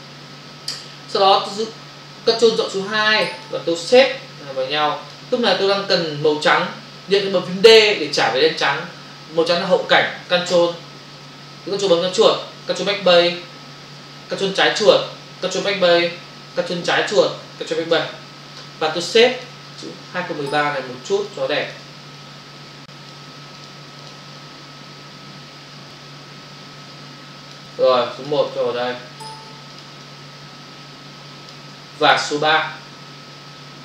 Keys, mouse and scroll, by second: 2.5 ctrl+click, 2.7 click, 3.9 ctrl+click, 4.1 click, 10.4 ctrl+BackSpace, 12.0 ctrl+click, 12.9 ctrl+BackSpace, 14.7 ctrl+click, 15.7 ctrl+BackSpace, 17.1 ctrl+click, 18.0 ctrl+BackSpace, 19.4 ctrl+click, 19.8 click, 21.6 ctrl+click, 22.2 click, 23.6 ctrl+click, 24.0 ctrl+double click, 28.3 ctrl+click, 28.6 click, 29.8 ctrl+click, 32.1 ctrl+click.